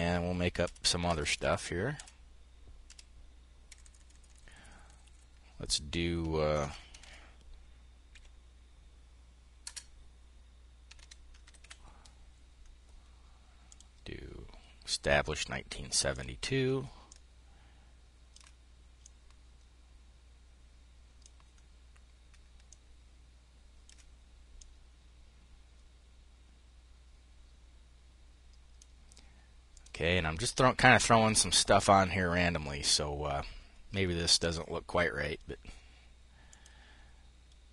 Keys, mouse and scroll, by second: 0.0 Left, 0.5 Left, 1.4 Left, 2.3 Left, 3.1 Delete, 5.7 Caps_Lock, 5.8-7.6 typing, 9.1-11.5 typing, 13.1 click, 14.6-16.1 drag, 18.4-21.8 drag.